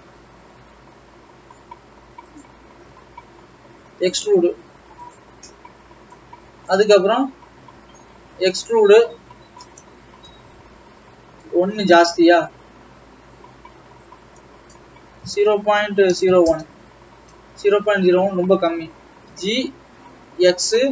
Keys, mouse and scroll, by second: 3.2 scroll down 3, 3.3 e, 5.5-6.7 scroll up 3, 6.7 click, 7.7 e, 12.4 Escape, 12.5 Escape, 13.3 g, 18.0 ctrl+z, 19.6 g.